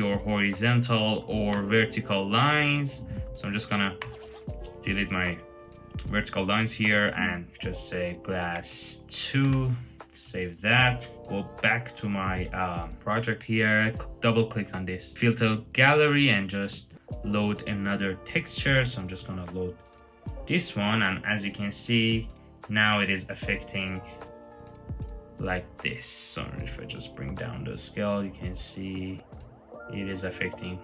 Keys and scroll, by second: 0.6 super+z, 1.3 BackSpace, 2.5 super+z, 3.8 BackSpace, 5.5 alt+super+s, 8.2 Tab, 8.4 space, 8.6 2, 9.2 Return, 21.0 super+-, 21.8 super+-.